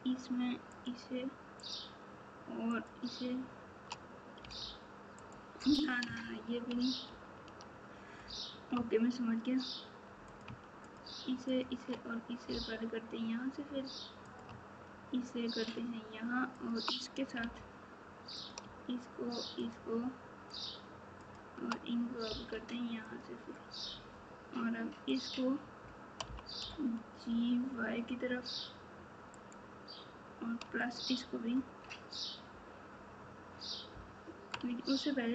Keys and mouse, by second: 5.2 click, 10.2 click, 10.8 shift+click, 15.6 shift+click, 16.5 shift+click, 19.5 click, 20.4 shift+click, 21.2 shift+click, 23.0 click, 25.0 click.